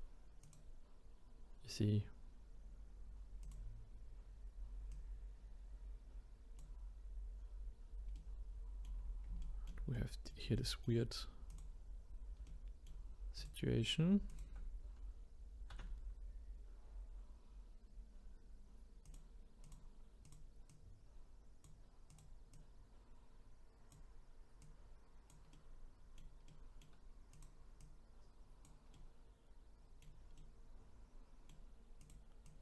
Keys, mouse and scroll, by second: 0.4 click, 3.4 click, 4.9 click, 8.2-11.5 middle drag, 11.5 click, 12.4 middle click, 13.4 click, 14.3 shift+click, 15.7 s, 19.7 click, 20.7 click, 22.1 click, 24.6 click, 25.5-27.3 middle drag, 27.3 click, 27.8-28.9 drag, 28.9-32.0 middle drag, 32.0 click, 32.4 click.